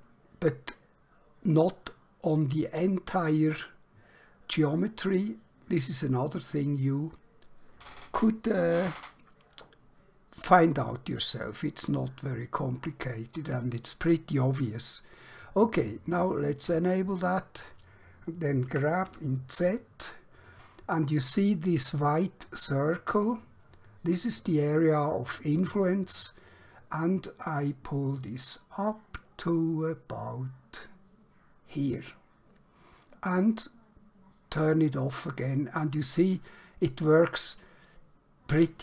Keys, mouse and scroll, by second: 3.7 middle click, 10.8 middle click, 16.9 click, 18.8-19.1 typing, 31.8 click, 35.1 click, 36.3 middle click, 37.9 scroll down 1, 38.7-38.8 scroll up 1.